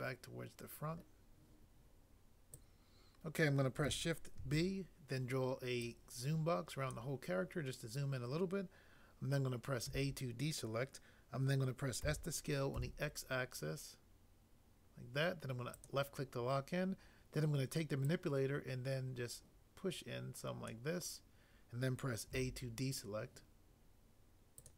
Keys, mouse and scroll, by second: 4.4 b, 9.9 a, 12.0 s, 12.7 x, 22.3 a.